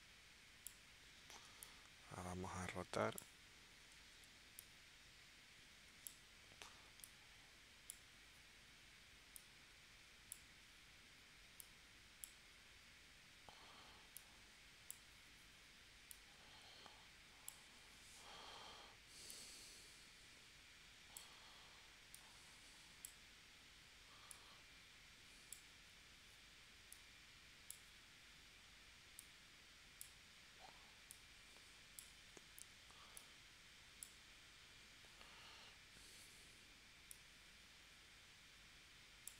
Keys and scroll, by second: 4.2 v.